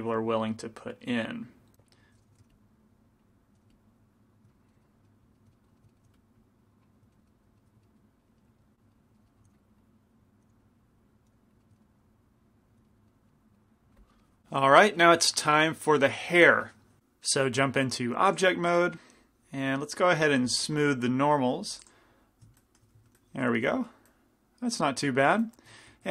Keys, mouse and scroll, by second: 2.0 middle click, 2.4 g, 2.9-4.9 drag, 2.9 f, 3.6 f, 6.5 click, 6.5 f, 7.7-8.7 middle drag, 9.0 middle click, 9.6 f, 9.9-11.6 drag, 10.5 f, 11.4 f, 11.7 middle click, 12.2 click, 12.9-14.4 middle drag, 18.4-20.5 drag, 20.6-26.1 middle drag, 21.9-26.1 drag, 23.1 a.